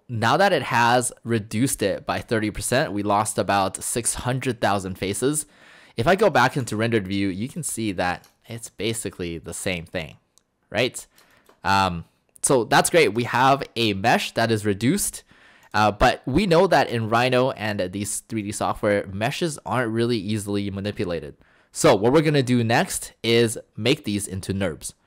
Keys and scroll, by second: 17.2 Escape.